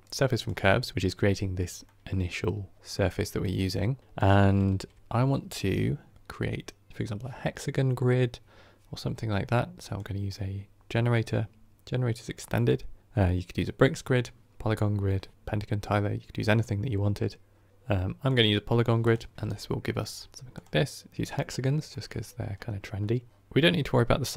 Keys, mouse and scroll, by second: 19.3 ctrl+shift+click, 19.5-20.1 scroll down 9, 20.1-21.1 middle drag, 21.1-23.3 drag, 23.3-24.3 scroll up 2.